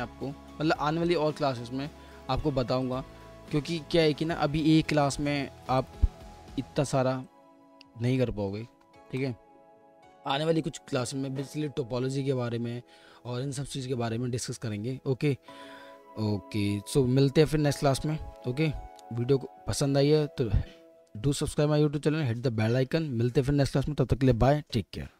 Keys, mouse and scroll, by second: 3.2 alt+middle click, 4.0-5.4 alt+drag, 4.0-5.4 alt+middle drag, 6.0-6.7 typing, 6.2-8.2 drag, 8.1-8.8 typing, 8.3-12.2 alt+drag, 8.3-9.2 alt+middle drag.